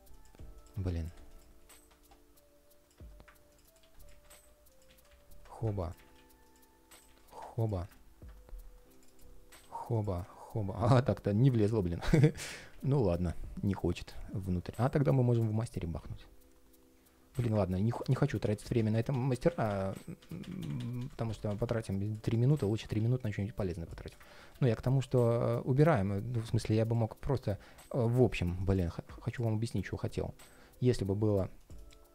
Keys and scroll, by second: 1.4 ctrl+shift+4, 3.5 super+c, 3.8 super+a, 4.0 shift+super+v, 4.6 super+a, 4.8 shift+super+v, 5.7 super+a, 5.9 super+c, 6.8 super+a, 7.0 shift+super+v, 9.3 super+x, 11.0 super+z, 12.4 super+v, 17.4 super+z, 19.2 super+z, 25.7 ctrl+shift+4.